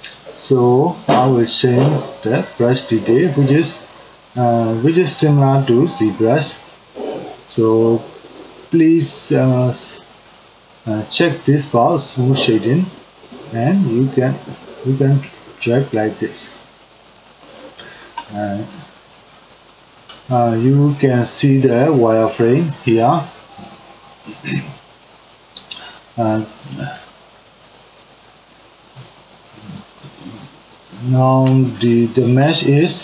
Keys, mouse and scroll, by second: 11.8-26.5 drag, 13.8 Left, 15.6 Left, 15.9 Left, 16.9 Left, 17.3 Left, 21.0 Left, 21.3 Left, 21.7 Left.